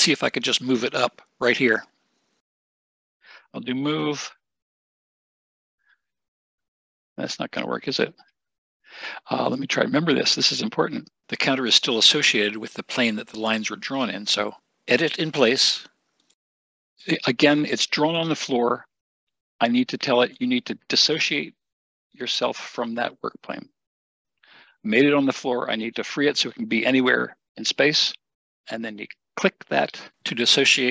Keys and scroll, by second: 3.8 m, 8.0 Escape, 8.2 Escape.